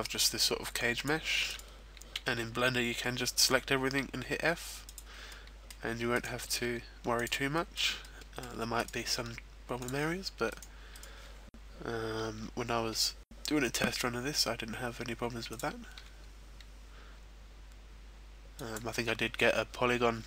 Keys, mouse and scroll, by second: 1.0 click, 1.4 right click, 2.3 e, 5.0 click, 5.3 middle click, 6.1 right click, 6.6 e, 7.3 click, 7.5 shift+middle click, 8.0 middle click, 8.8 right click, 9.1 e, 9.8 click, 10.5 right click, 11.2 right click, 12.6 g, 15.5 click, 16.1 g, 18.7 click.